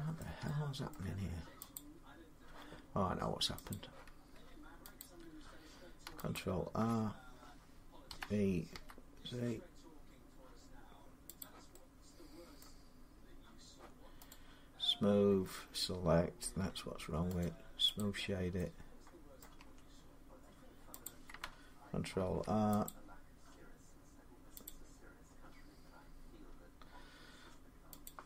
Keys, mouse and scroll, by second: 0.0 middle click, 0.7 shift+middle click, 1.5 click, 3.5 click, 4.8 click, 6.1 alt+click, 7.9-8.5 typing, 9.9 s, 11.2 click, 12.4 middle click, 14.1 right click, 16.4 Tab, 17.2 right click, 17.8 click, 19.2 middle click, 19.4 Tab, 20.8 click, 22.0 ctrl+r, 22.6 click, 24.4 click, 27.8 click.